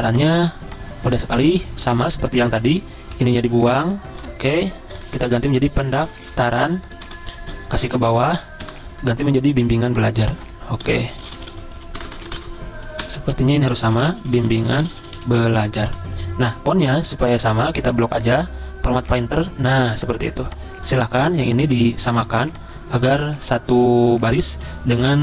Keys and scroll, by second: 3.1 Delete, 3.7 ctrl+shift+Right, 3.8 ctrl+shift+Right, 4.8-7.4 typing, 8.1 ctrl+shift+Left, 8.6 Delete, 9.3-12.5 typing, 13.6-16.3 typing, 19.5-20.8 typing, 22.2 i, 24.6 ctrl+[, 25.0 ctrl+[, 25.1 ctrl+[.